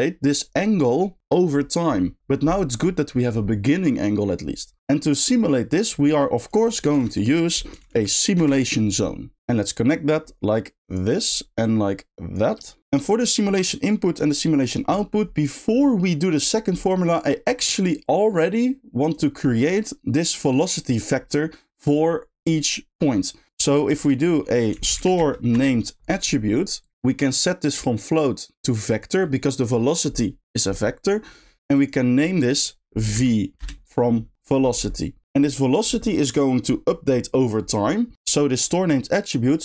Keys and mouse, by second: 4.9 middle click, 5.7 click, 6.1 g, 6.6 click, 6.9 shift+a, 9.4 ctrl+z, 9.7 click, 10.0-11.0 drag, 11.6-12.4 drag, 12.6 drag, 17.7-19.1 middle drag, 19.1 right click, 23.5 drag, 27.8-29.0 drag, 31.8-38.1 drag, 38.3 middle click, 38.7 click.